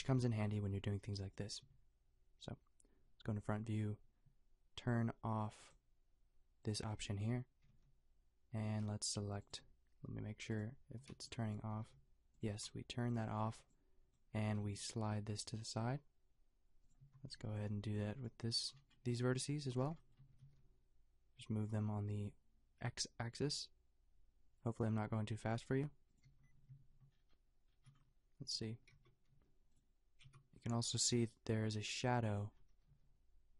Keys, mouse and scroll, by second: 0.5 b, 7.7 g, 11.0-13.5 typing, 14.5 g, 17.0 a, 17.4 b, 20.3 g, 26.3 a, 28.9 shift+Tab, 29.3 shift+g, 30.2 shift+Tab, 30.8 shift+g, 32.9 shift+g.